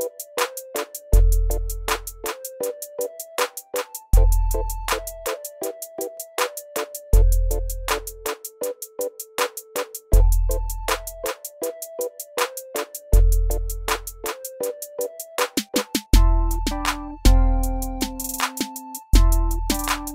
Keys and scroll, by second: 1.3 w, 3.8 alt+w, 5.7 t, 7.7 t, 15.4 alt+q.